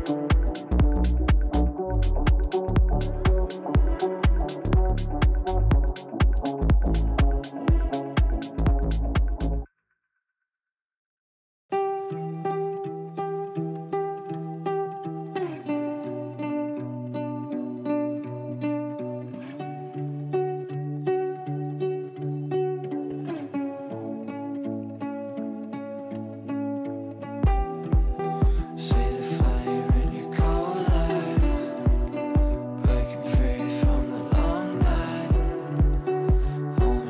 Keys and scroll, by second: 1.7 ctrl+q, 22.9 ctrl+q.